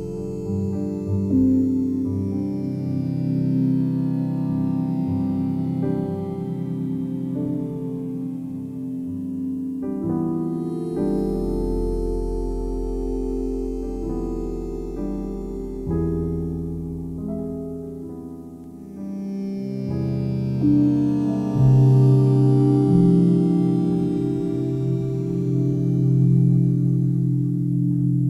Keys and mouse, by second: 1.3 click, 1.9-3.4 alt+drag, 3.7 click, 4.6 typing, 6.0 click, 6.4-7.2 typing, 7.0-8.6 alt+drag, 8.8 alt+click, 9.5-10.3 typing, 10.2 ctrl+alt+click, 10.6-13.3 ctrl+alt+drag, 14.8 click, 15.2 drag, 15.9 click, 16.5 click, 18.1 click, 18.8 alt+click, 20.2 1, 20.7 ctrl+alt+click, 21.0 alt+shift+click, 21.5-23.2 alt+drag, 23.4 ctrl+alt+click, 24.0 typing, 24.3-26.6 alt+drag, 27.1-27.5 typing.